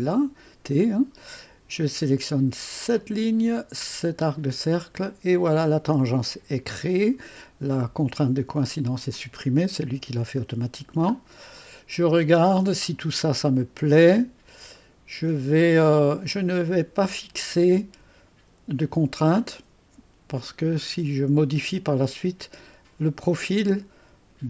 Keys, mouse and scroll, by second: 3.0 click, 4.3 click, 5.5 click, 6.8-8.1 scroll up 1, 10.9-12.4 scroll down 1, 12.4-14.8 scroll down 1, 14.8-15.7 scroll down 1, 15.7 scroll down 1, 16.0-22.2 drag.